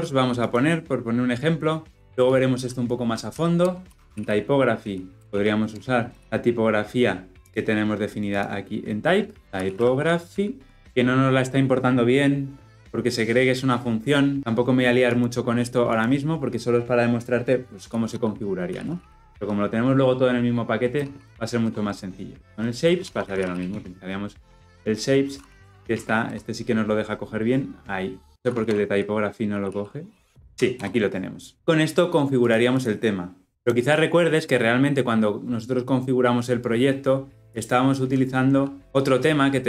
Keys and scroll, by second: 5.6 Return, 6.2 ctrl+alt+Left, 26.2 Return, 30.7 Return, 37.6 ctrl+b.